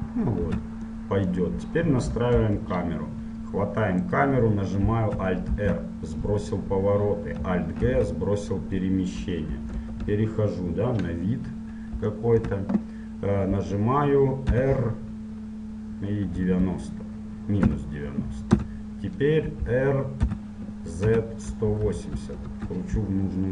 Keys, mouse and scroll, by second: 0.6 Tab, 1.1-2.6 middle drag, 2.2 Right, 2.6 KP_1, 4.2-8.0 right drag, 5.7 alt+r, 8.0 alt+g, 9.4 KP_1, 10.0 KP_Enter, 10.0 KP_3, 11.2-14.7 middle drag, 14.7 r, 20.4 r.